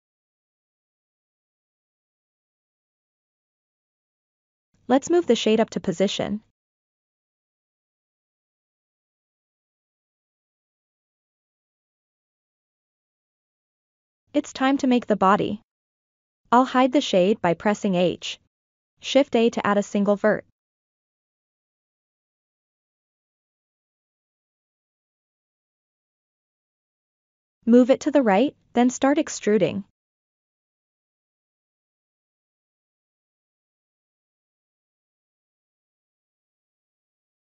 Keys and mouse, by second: 0.4 Tab, 1.2-1.6 ctrl+middle drag, 1.7-2.5 middle drag, 2.7 click, 3.9 KP_1, 5.5 g, 6.1-8.9 drag, 10.5-10.8 shift+middle drag, 11.1-11.4 ctrl+middle drag, 11.6-12.1 shift+middle drag, 16.5 click, 17.7 h, 19.3 shift+a, 23.6-24.3 ctrl+middle drag, 24.6-24.9 shift+middle drag, 25.4-28.1 drag, 31.0 e, 34.9 e, 37.2 e.